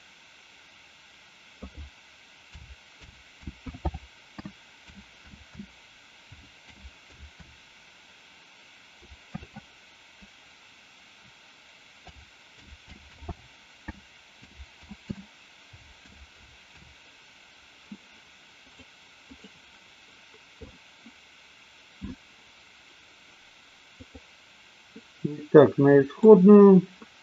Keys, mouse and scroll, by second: 24.2 click, 25.4-26.2 middle drag.